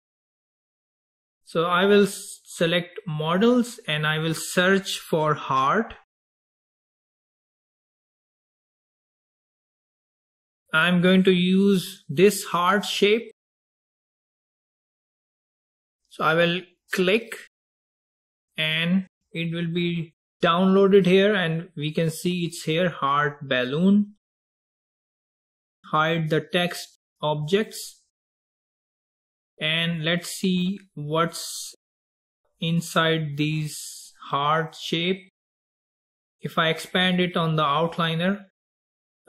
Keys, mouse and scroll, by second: 2.7 click, 4.2-7.3 drag, 21.2-22.7 scroll up 3, 22.7 drag, 26.7 click, 27.6 click, 29.3 click, 30.0 click, 32.2-33.3 scroll up 5, 33.4-36.0 scroll up 2, 38.0 click.